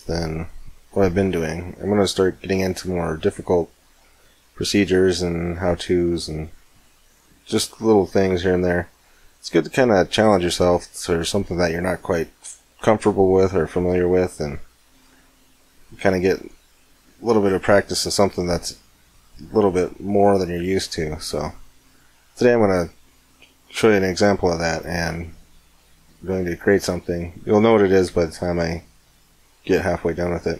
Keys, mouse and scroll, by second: 1.7 right click, 5.0 middle click, 5.5-7.3 middle drag, 7.9-10.1 middle drag, 14.8-17.3 middle drag, 21.5-22.9 middle drag, 27.3 right click, 27.8 x, 29.0-30.5 middle drag.